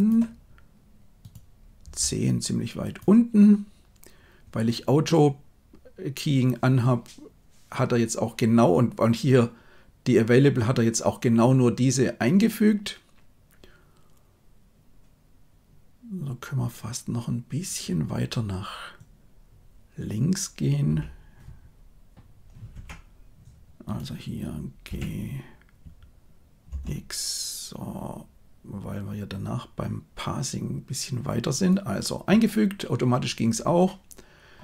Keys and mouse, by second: 1.8 r, 20.8 g, 23.8 click, 24.8 g.